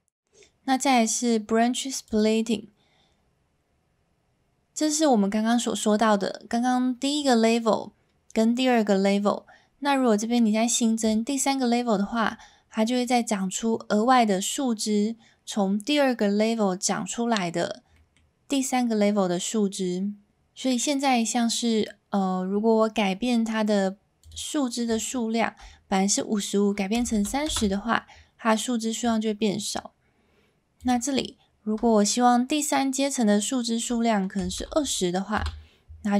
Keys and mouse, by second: 11.1 click, 12.8 middle drag, 17.9 middle click, 24.2-28.1 drag, 30.8-36.0 drag.